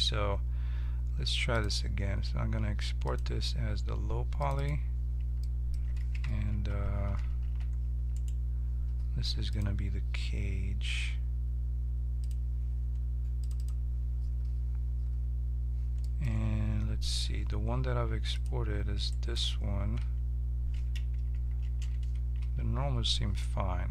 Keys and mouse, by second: 1.5-3.1 drag, 4.6-6.5 drag, 6.5 ctrl+h, 7.4 alt+h, 8.1-9.5 right drag, 9.5 middle click, 10.0-12.3 drag, 13.6-16.0 drag, 16.3 1, 18.3 click, 19.8 click, 19.8 right click, 20.0 Tab, 21.6 ctrl+n, 22.4 Tab.